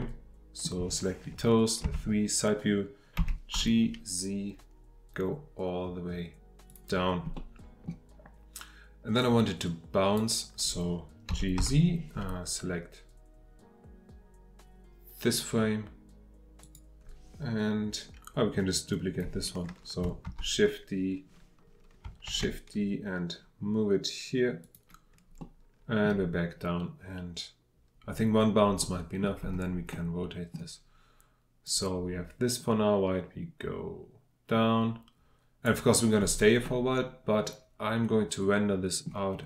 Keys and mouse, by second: 0.0 middle click, 0.4 middle click, 1.8 KP_3, 3.2 g, 3.5 z, 7.3-7.9 middle drag, 9.2-10.2 drag, 11.3 g, 11.6 z, 15.3 click, 18.8-19.3 drag, 20.2 shift+d, 24.6 click, 25.4-26.0 drag, 28.8-29.4 middle drag, 29.9-30.5 middle drag, 31.6-35.7 middle drag, 36.6-38.8 middle drag, 38.8 click.